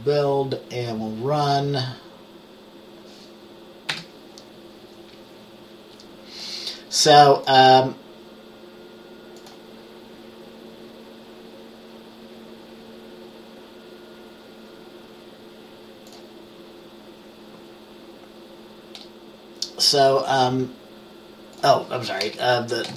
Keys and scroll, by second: 4.0 F5, 22.4-22.9 typing.